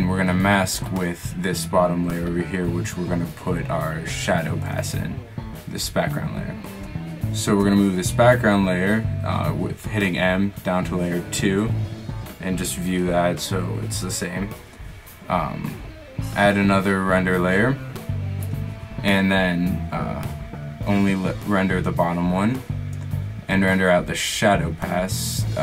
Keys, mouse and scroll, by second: 6.3 right click, 7.9 m, 12.3 click, 14.3-16.5 middle drag, 18.6-21.2 middle drag, 23.0 middle click.